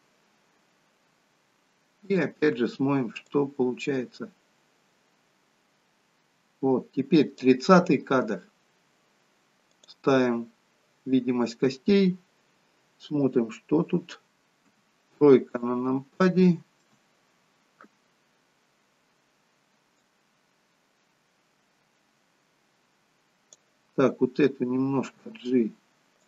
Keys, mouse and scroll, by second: 2.2 click, 3.5 click, 9.9 click, 14.3 middle click, 14.9 KP_3, 16.3 shift+middle click, 20.1 click, 25.3 g.